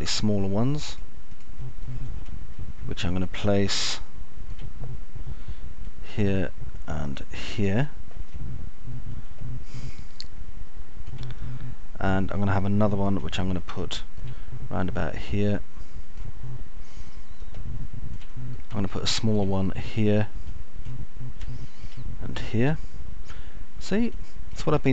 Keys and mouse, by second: 0.0 alt+middle click, 4.7-6.7 alt+middle drag, 10.3-13.2 alt+middle drag, 13.7 middle click, 15.3 alt+middle click, 19.7-20.3 alt+middle drag, 20.8-21.3 alt+middle drag, 23.7-24.0 alt+middle drag.